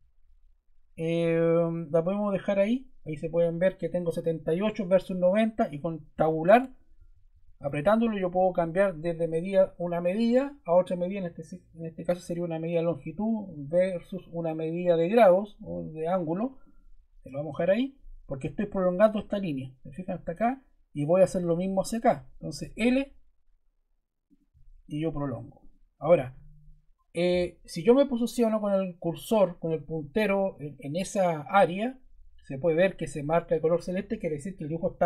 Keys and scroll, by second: 6.1 Tab, 17.5 Escape, 22.6 l, 26.2 Escape.